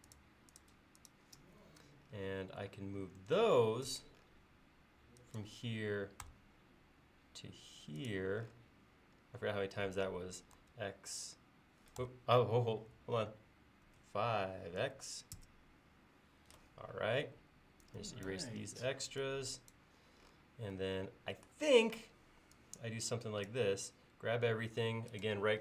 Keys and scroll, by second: 3.9 m, 10.6 x, 12.0 BackSpace, 13.9 5, 17.2 e, 22.0 space.